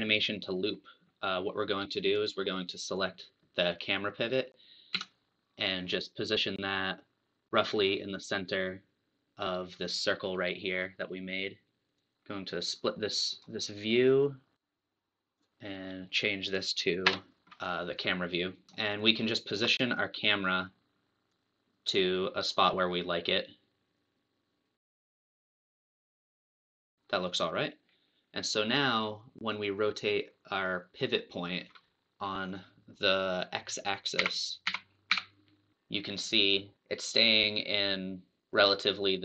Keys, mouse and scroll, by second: 2.1 click, 2.9 click, 4.9 KP_3, 6.6 click, 12.2 click, 13.5-15.0 right drag, 16.5 click, 17.2 KP_0, 17.4 scroll up 4, 17.6-18.0 scroll down 2, 18.7 scroll down 2, 18.7-20.3 shift+middle drag, 20.3 click, 21.3 click, 25.0 shift+middle click, 25.6-28.0 drag, 31.0 click, 34.2 t, 34.6 t, 35.2 n, 35.7-36.9 drag.